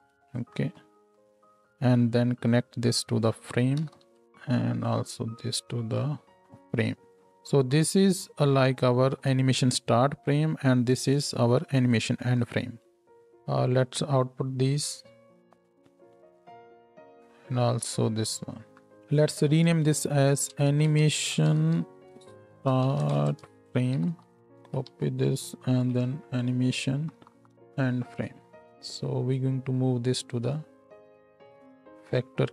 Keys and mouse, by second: 4.9-6.1 drag, 13.0 KP_0, 18.9 n, 19.1 click, 19.3-21.0 middle drag, 27.1 Right, 27.1-32.2 middle drag, 27.4 shift+Left, 32.2-32.5 drag.